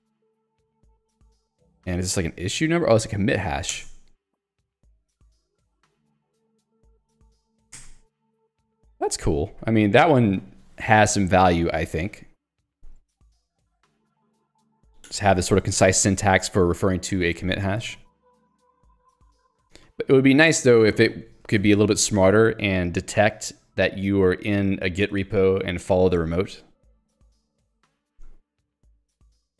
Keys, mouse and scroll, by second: 0.4 k, 3.8 alt+Return, 4.8 k, 6.6-8.0 typing, 13.9 alt+Return, 14.4 Escape, 15.1 h, 17.9 Escape, 18.2 j, 19.6 k, 21.0 j, 28.5 Escape, 28.9 j.